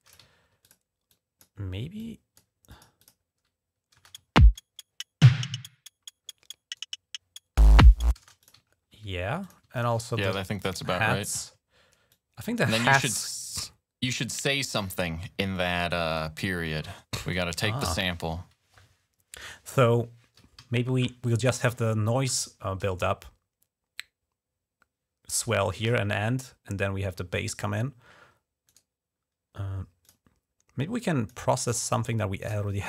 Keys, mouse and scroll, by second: 0.2 ctrl+scroll up 2, 0.4 click, 0.9 click, 1.8 click, 2.5 click, 2.6 typing, 2.8 click, 3.8 typing, 4.2 ctrl+scroll down 1, 6.1-6.5 scroll down 2, 8.0 space, 8.2 click, 8.5 scroll up 3, 9.3 click, 9.6 ctrl+click, 10.2 s, 10.4 click, 10.8-11.1 ctrl+scroll down 1, 11.1 ctrl+click, 11.9-15.1 drag, 15.4 click, 16.2 scroll down 1, 19.3 scroll up 2, 20.4 ctrl+s, 27.4 scroll down 2, 28.5 right click, 29.8 click, 30.8 click, 31.5 click, 32.3 click.